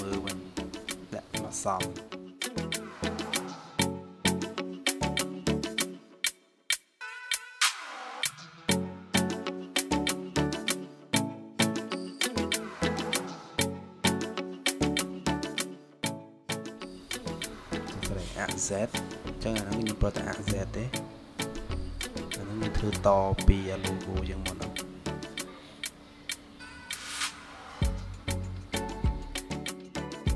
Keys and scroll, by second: 0.6 Return, 1.3 0, 13.4 ctrl+z.